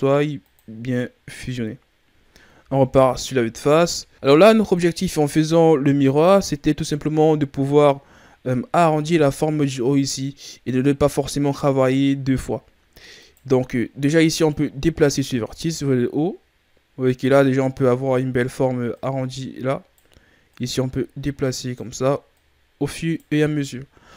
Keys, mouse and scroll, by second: 0.3 click, 1.1-2.6 scroll down 5, 2.6 KP_1, 3.8 ctrl+scroll up 1, 4.1 KP_3, 6.0-6.7 ctrl+scroll down 2, 6.7-7.9 scroll up 3, 8.8 Tab, 12.2-13.1 shift+scroll up 2, 13.1-14.4 right drag, 14.4 click, 18.9-20.6 right drag, 22.3-23.9 right drag, 23.9 ctrl+z.